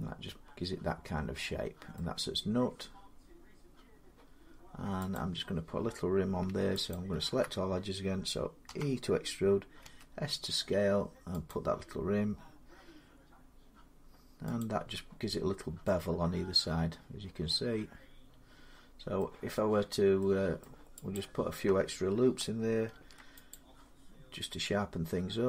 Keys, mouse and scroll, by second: 1.8 middle click, 5.0 click, 6.7 alt+click, 8.5 e, 9.6 s, 11.3 click, 14.4 click, 17.6-19.0 drag, 19.0-20.2 middle drag, 21.0 click, 22.7 ctrl+r, 23.3 click.